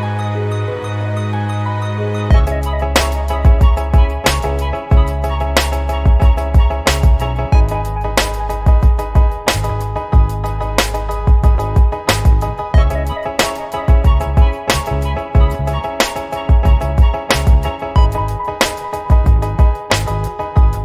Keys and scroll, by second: 8.6 t, 17.7-19.3 typing.